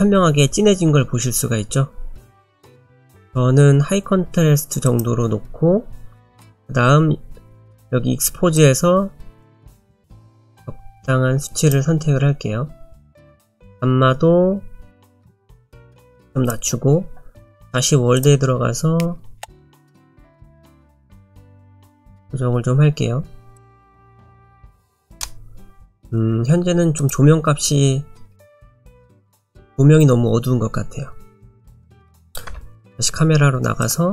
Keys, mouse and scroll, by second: 2.7 click, 8.6 click, 13.2 click, 17.6 click, 18.2 click, 31.5 click, 32.5 KP_0, 33.8 click.